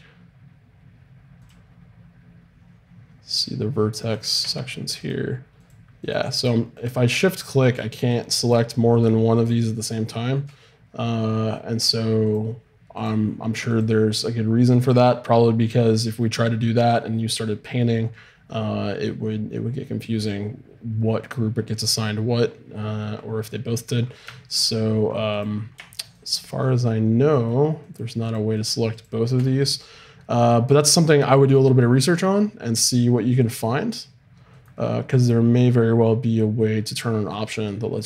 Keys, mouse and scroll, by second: 5.0-22.5 drag, 27.8-38.0 middle drag.